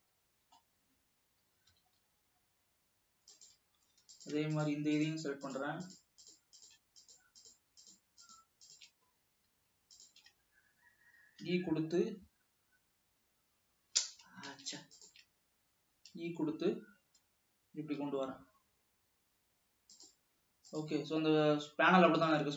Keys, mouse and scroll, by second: 0.8-1.7 scroll up 3, 1.9 g, 4.3 click, 5.3 shift+click, 5.8 shift+click, 6.2 shift+click, 6.5-7.0 shift+drag, 7.4-7.8 shift+drag, 8.6 shift+click, 8.8-9.3 shift+drag, 9.3 scroll down 1, 10.2 shift+drag, 11.8 e, 14.8 ctrl+z, 15.3-16.3 shift+drag, 16.3 e.